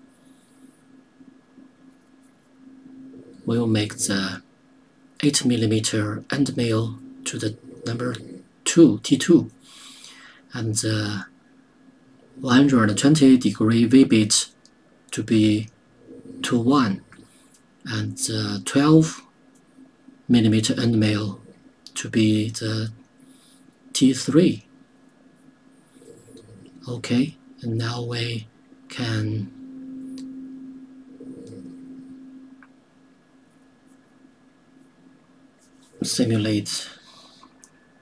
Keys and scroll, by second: 6.2 KP_2, 22.9 KP_3.